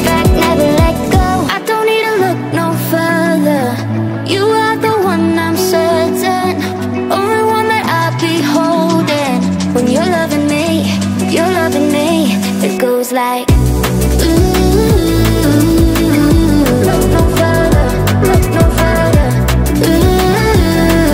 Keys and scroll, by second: 15.1 space.